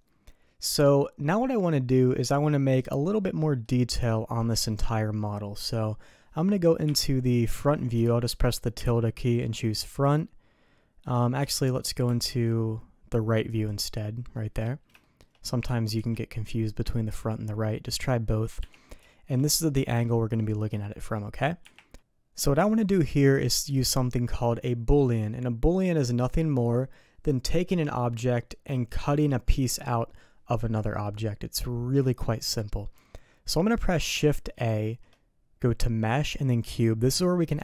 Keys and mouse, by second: 0.6-3.6 middle drag, 6.8 `, 8.7 `, 11.4 `, 12.0 `, 15.0 shift+click, 19.0 shift+middle click, 20.4 middle click, 34.5 shift+a.